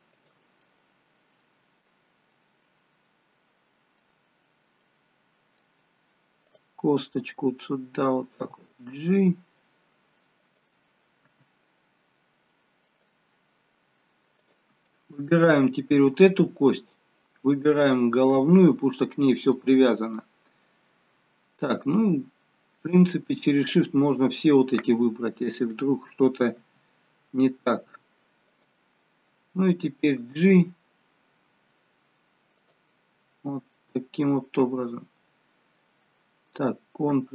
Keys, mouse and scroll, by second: 0.6 middle click, 2.2-3.6 scroll up 1, 3.6-4.1 scroll up 1, 4.1 middle click, 5.0 middle click, 6.5 click, 8.5 g, 11.4 r, 15.1 click, 15.1 scroll up 2, 17.9 shift+click, 19.1-19.7 scroll down 1, 19.7 middle click, 23.0 shift+click, 26.7 r, 33.0-33.8 scroll down 1, 33.8-34.2 scroll down 2, 36.2 scroll down 1.